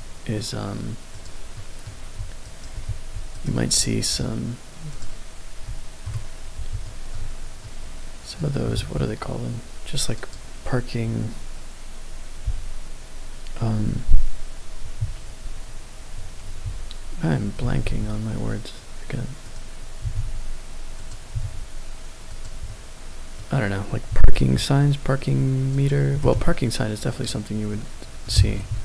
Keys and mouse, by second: 0.0 click, 1.2 click, 1.5-1.9 middle drag, 2.5 shift+right click, 4.9 click, 6.0 KP_7, 6.8 middle drag, 7.6-8.4 middle drag, 8.7 shift+a, 16.6 KP_1, 17.6 s, 17.8 z, 19.4 right click, 20.0 s, 20.1 z, 21.0 click, 21.3 s, 21.4 z, 22.3 click, 22.6 middle click, 24.1 s, 24.3 x, 25.7 click, 26.1 s, 26.3 x, 27.1 click, 27.7-28.2 middle drag, 28.7 KP_7.